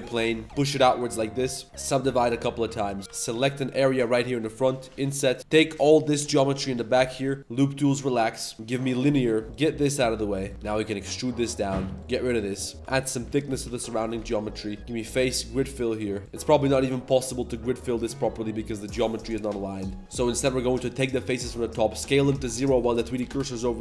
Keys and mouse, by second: 0.2 s, 0.4 2, 0.4 g, 1.4 ctrl+r, 1.6-3.0 typing, 4.2 click, 4.8 i, 5.4 ctrl+shift+z, 5.5 shift+click, 5.8 shift+click, 6.1 shift+click, 6.6 shift+click, 6.9 w, 8.5-9.0 drag, 9.4 shift+s, 9.4 1, 9.4 3, 10.6 e, 11.9-15.6 typing, 12.3 click, 14.0 alt+click, 14.8 click, 16.0 middle click, 16.3 click, 16.6 click, 16.8 click, 17.0 click, 17.4 click, 17.8-19.0 drag, 20.0 ctrl+z, 20.0 g, 20.2 g, 21.4 click, 22.3 z, 22.8 s, 23.5 z.